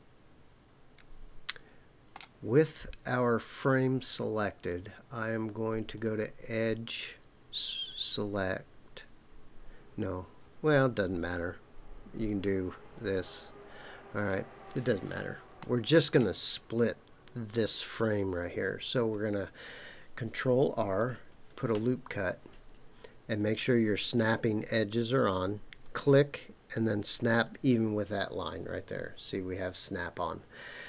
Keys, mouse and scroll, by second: 5.9 click, 12.2 click, 13.1 click, 14.0-15.4 scroll up 2, 15.6 shift+middle click, 21.5 ctrl+r, 27.4 click.